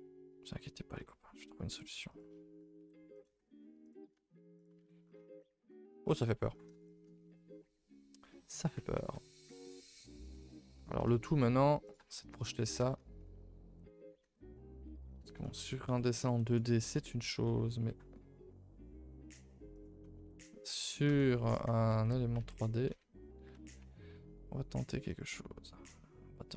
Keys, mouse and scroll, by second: 5.4 scroll down 3, 6.0 scroll up 2, 7.2-7.9 scroll down 8, 7.4 a, 7.5 a, 7.9-8.6 scroll up 4, 8.6 alt+h, 8.9 a, 9.1 a, 10.3-10.8 middle drag, 10.8-11.8 scroll up 7, 11.1 shift+middle drag, 11.8 click, 12.1 shift+middle drag, 12.3 scroll up 2, 12.5 Tab, 12.8 middle click, 12.9 a, 13.1 a, 13.7 l, 14.2 middle click, 15.0 scroll down 4, 15.4 middle click, 15.7-16.3 scroll up 2, 16.3 middle click, 16.7 g, 20.0 middle click, 20.1 middle click, 20.7 middle click, 21.0 Tab, 21.9 ctrl+s, 22.3 ctrl+z, 22.9 ctrl+z, 23.5 ctrl+s, 23.8 Tab, 24.7-25.0 drag.